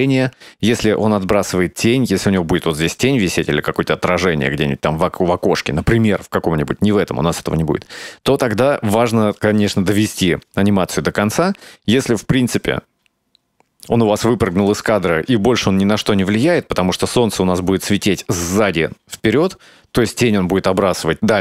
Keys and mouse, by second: 12.3-14.5 drag, 14.6 space, 16.4 space.